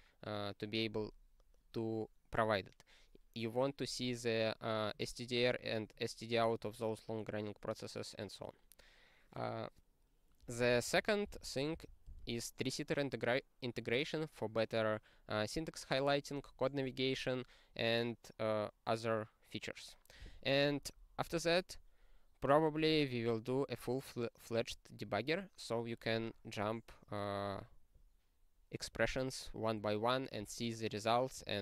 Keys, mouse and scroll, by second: 10.7 ctrl+p, 10.9 ctrl+p, 11.2 ctrl+space, 11.4 ctrl+n, 11.8 ctrl+n, 12.0 ctrl+g.